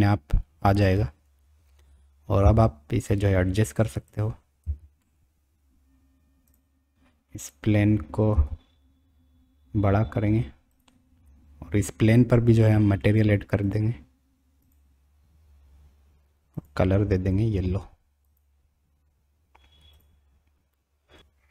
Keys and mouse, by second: 2.4 g, 4.6 g, 8.3 s, 15.3 click, 16.5 click.